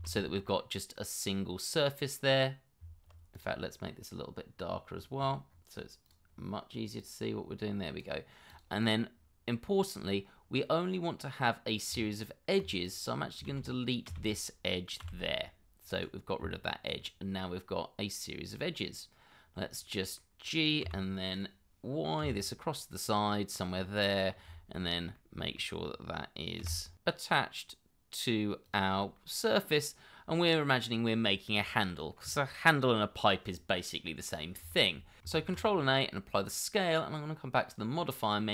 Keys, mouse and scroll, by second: 0.0 shift+z, 0.6 middle click, 2.8 Tab, 4.7-7.7 scroll down 1, 9.5 scroll up 1, 10.3 scroll down 1, 10.6 middle click, 11.9 Tab, 13.5 shift+z, 15.0 x, 16.4 Tab, 17.5 middle click, 19.5 scroll down 1, 19.8 middle click, 20.8 g, 22.2 y, 23.8 middle click, 24.5 shift+middle click, 24.8 scroll up 1, 25.1 middle click, 26.6 g, 26.9 x, 29.0 scroll down 1, 29.2 middle click, 33.5 middle click, 34.1 scroll up 1, 34.4 shift+middle click, 34.7 scroll up 1, 35.0 middle click, 35.4 ctrl+a.